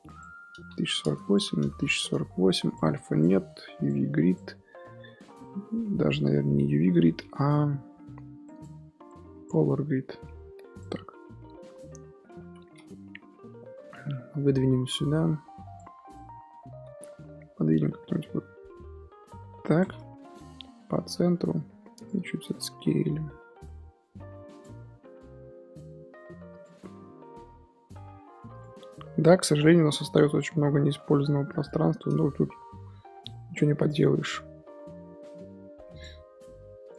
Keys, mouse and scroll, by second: 7.2 n, 9.4-10.3 drag, 10.3 n, 12.4 l, 35.3 middle click, 35.9 click, 36.8 click.